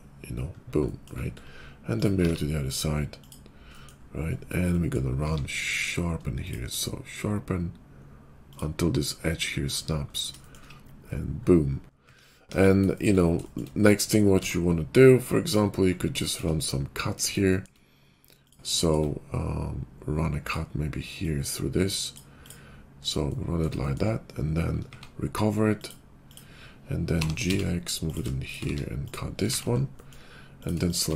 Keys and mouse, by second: 2.0 alt+middle click, 2.2 alt+x, 3.2 alt+x, 3.2 click, 3.3-6.1 middle drag, 6.1 shift+q, 8.5-12.3 middle drag, 10.8 /, 12.3-15.6 drag, 12.3 KP_5, 14.2 d, 15.6-18.6 middle drag, 20.3 click, 21.1-26.0 drag, 24.8 q, 26.3-27.7 drag, 26.3 q, 27.1 g, 28.3 shift+click, 28.6 q, 29.4 shift+2, 31.0 middle click, 31.1 alt+x.